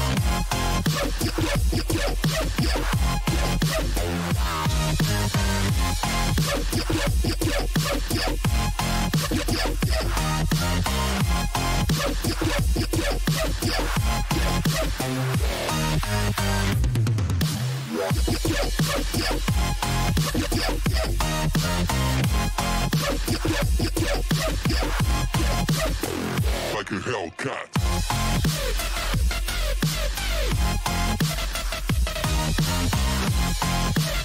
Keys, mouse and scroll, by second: 1.6 k, 3.7-9.6 middle drag, 20.1-24.8 middle drag, 27.1 middle click, 28.9 a, 32.1 middle click.